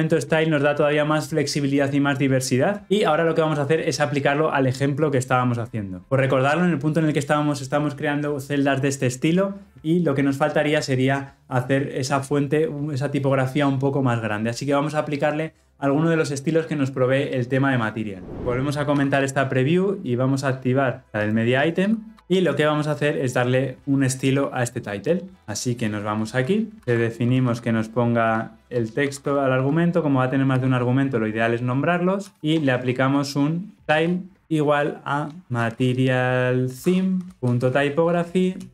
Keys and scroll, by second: 22.1 ctrl+-, 26.8 alt+Return, 34.4 Return.